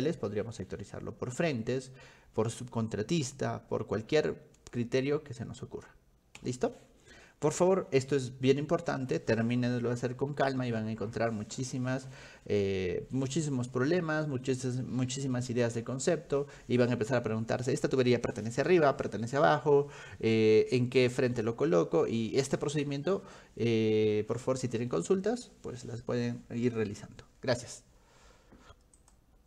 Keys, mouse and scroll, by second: 29.0 click.